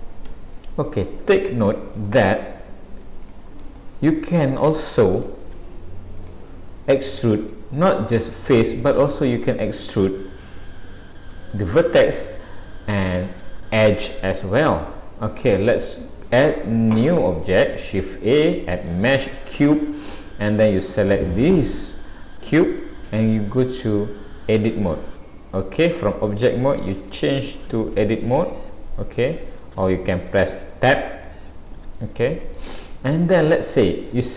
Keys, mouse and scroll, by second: 2.0 click, 4.2 middle click, 5.4 shift+a, 8.2 middle click, 9.1-9.5 scroll up 2, 9.8 click, 11.7 middle click, 14.5 Tab, 17.7 middle click, 19.5-20.7 scroll up 1, 20.9 click, 27.5 click, 31.3 middle click, 32.9 middle click.